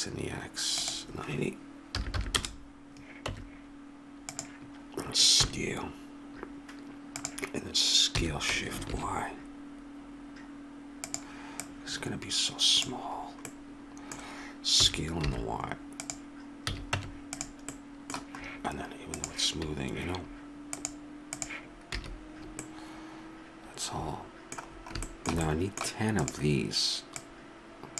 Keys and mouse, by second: 3.3 Tab, 5.4 s, 8.2 s, 11.6-13.5 drag, 14.8 s, 16.7 a, 16.9 Tab, 21.9 a, 22.4-23.9 middle drag, 26.2-27.6 right drag, 27.6-27.9 drag.